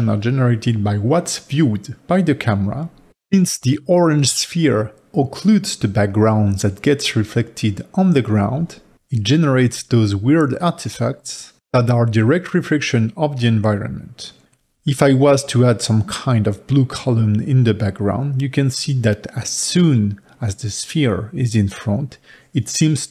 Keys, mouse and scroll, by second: 14.8 g.